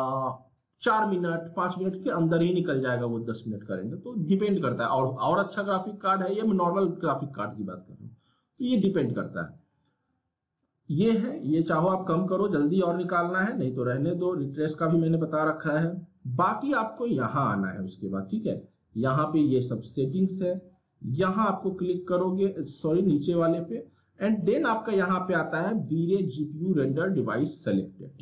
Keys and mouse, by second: 8.0 click, 12.0 click, 20.7 click.